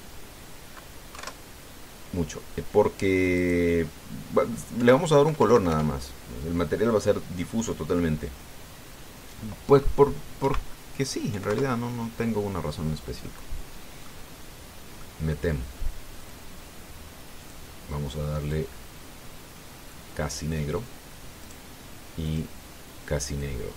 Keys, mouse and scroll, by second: 0.6 click, 1.9 KP_1, 4.1 click, 5.5 End, 6.0 BackSpace, 11.2 KP_Decimal, 12.1 KP_5, 12.3 KP_Enter, 14.0 middle click, 15.8 middle click, 16.9 click, 18.2 click, 19.2 click, 20.6 click, 22.2 right click, 23.0 click.